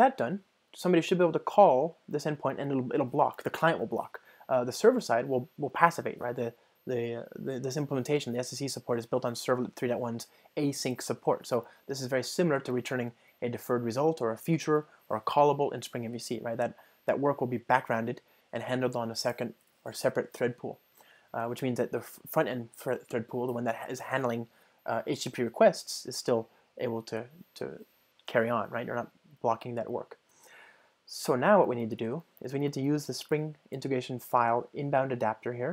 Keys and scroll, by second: 32.9 ctrl+shift+super+o.